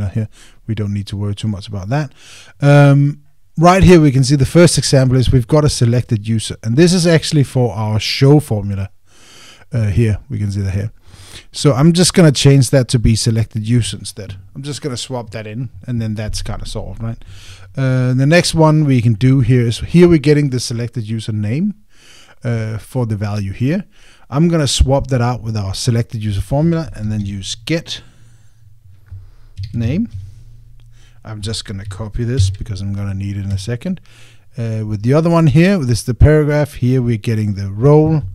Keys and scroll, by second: 16.1 Escape, 30.9 Tab, 33.2 super+c, 34.3 Escape.